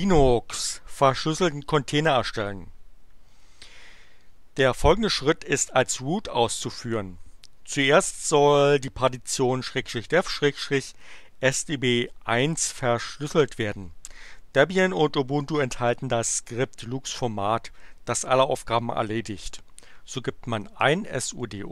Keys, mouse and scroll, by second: 20.6-21.7 typing.